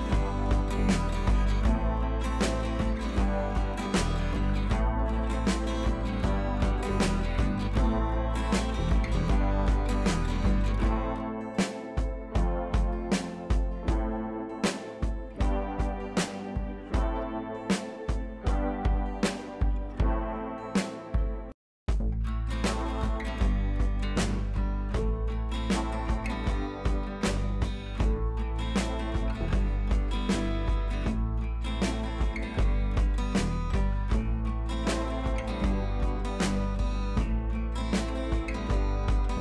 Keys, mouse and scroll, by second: 2.1-2.5 scroll down 1, 2.9 click, 4.2 click, 5.5-5.9 drag, 7.9 ctrl+z, 9.2-10.2 click, 13.1 click, 15.5-18.7 drag, 20.5-20.8 drag, 26.0 click, 29.1 click, 29.9 ctrl+z, 30.7 click.